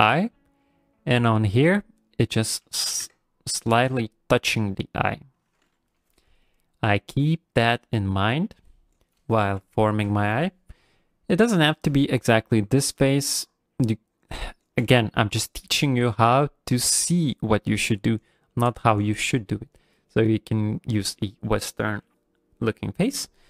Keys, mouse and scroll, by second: 9.0 right click, 9.7 ctrl+middle click, 11.8 click.